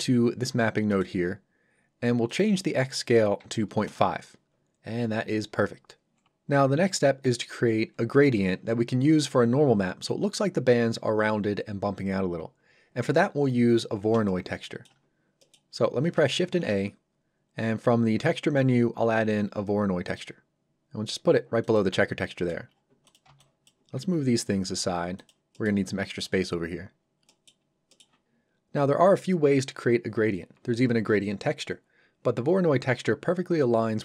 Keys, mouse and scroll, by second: 0.3 scroll up 1, 0.9 middle click, 1.2-1.6 scroll up 1, 1.6-2.3 scroll down 1, 2.3 click, 3.4 KP_5, 3.9 Return, 7.1 scroll up 1, 13.3 scroll down 1, 14.2 shift+middle click, 15.4 middle click, 15.5 middle click, 15.7 scroll down 1, 20.1 click, 21.9 scroll down 1, 22.4 middle click, 22.7 scroll down 1, 23.0 click, 23.2 b, 23.4 click, 23.9 g, 25.2 click, 25.5 middle click, 26.7 scroll up 1, 27.3 middle click, 27.6 scroll up 1, 27.9 middle click.